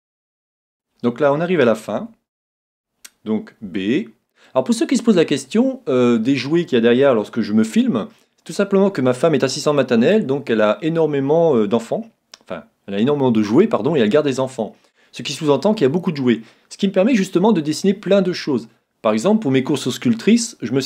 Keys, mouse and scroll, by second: 2.0 a, 2.6 a, 3.6 b.